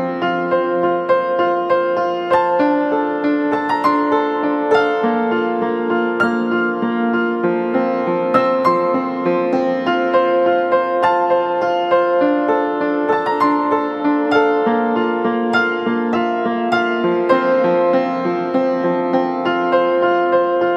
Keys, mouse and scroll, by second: 0.2-3.0 scroll down 1, 16.4 ctrl+z, 17.8 ], 18.0 ], 18.1 ], 18.4 ].